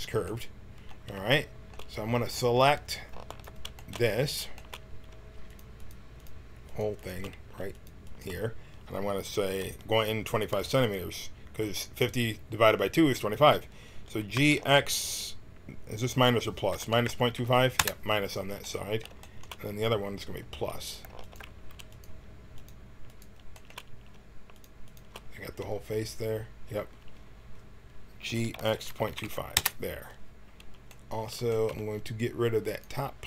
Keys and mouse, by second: 3.2 right click, 3.7 click, 3.8 right click, 3.9 click, 3.9 middle click, 14.3 g, 18.6 middle click, 19.5 middle click, 21.2-23.7 drag, 23.7-25.6 middle drag, 25.6 click, 25.8 middle click, 25.9 click, 28.2 middle click, 28.2 g, 32.6 click.